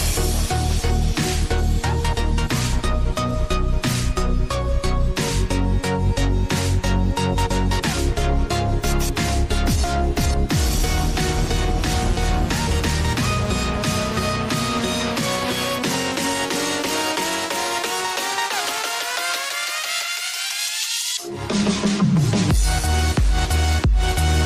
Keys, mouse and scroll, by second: 0.6-1.5 scroll down 1, 1.9 click, 2.9-4.0 drag, 4.9-7.4 drag, 9.6 click, 11.0 click, 12.8 click, 13.9 s, 15.6 ctrl+z, 16.0 click, 17.2 s, 18.5-19.5 scroll down 2, 19.5 click, 20.9-23.0 drag.